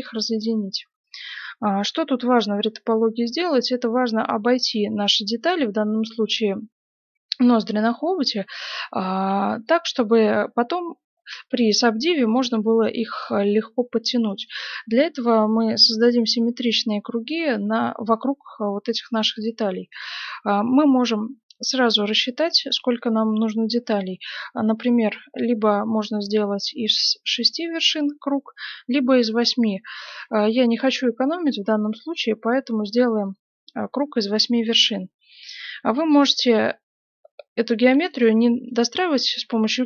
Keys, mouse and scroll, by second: 0.9-3.4 middle drag, 8.9-10.6 middle drag, 9.6 right click, 14.2 right click, 15.2-16.9 middle drag, 15.9 right click, 17.5 g, 18.6-21.7 right drag, 18.8 g, 20.1 g, 29.5 right click, 30.1 g, 31.3-34.1 right drag, 31.5 g, 32.6 g, 34.6 right click, 38.1-39.7 middle drag, 38.6 right click, 39.4 e.